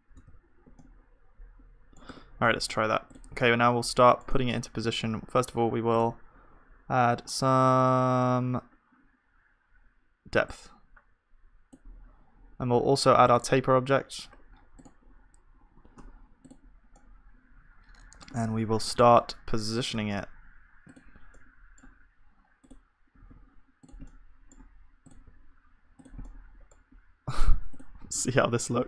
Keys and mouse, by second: 0.3 ctrl+shift+z, 2.1 Tab, 3.6-5.1 drag, 7.7-12.5 drag, 16.1 Tab, 16.9-18.5 drag, 16.9-19.3 middle drag, 18.9 g, 22.7-23.8 drag, 23.2 g, 25.1 click, 25.1 g, 25.2 g, 27.8 g, 28.1 g.